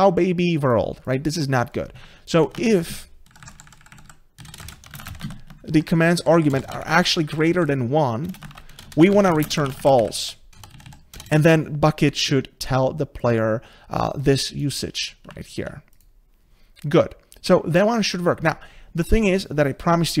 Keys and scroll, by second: 2.6 ctrl+c, 5.3 ctrl+v.